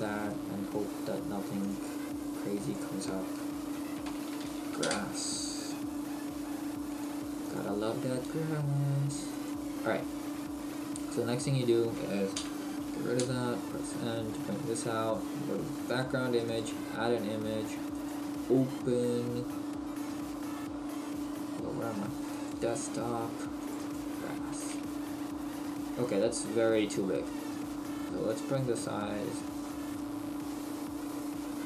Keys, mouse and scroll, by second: 10.3-12.4 scroll down 1, 12.4-13.2 scroll down 3, 12.4 t, 14.5 scroll down 1, 15.9 click, 16.5 click, 17.9 click, 23.9 click, 24.7-25.7 scroll down 13, 25.7-27.0 scroll up 2, 27.2 scroll up 1, 28.4 click.